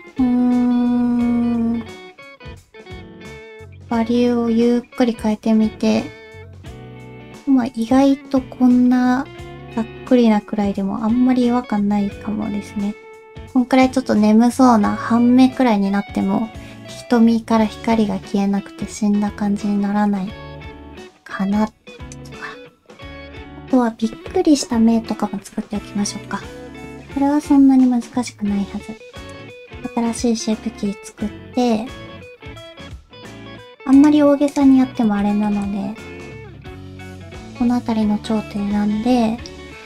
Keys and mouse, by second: 26.0 middle click, 29.3 click, 32.4 shift+middle click, 33.4 Tab, 33.9 click, 34.5 click, 35.1 shift+middle click, 36.2 alt+a, 36.2 click, 37.0 shift+click, 39.4 alt+o.